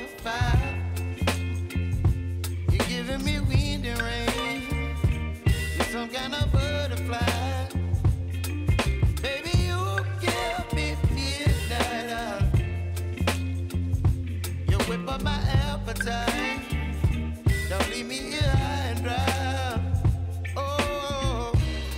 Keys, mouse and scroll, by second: 1.6 click, 2.7 F9, 3.7 click, 4.1 space, 7.4-12.6 drag, 12.6-15.9 drag, 15.9-18.3 drag, 18.3-20.4 drag, 20.6 space.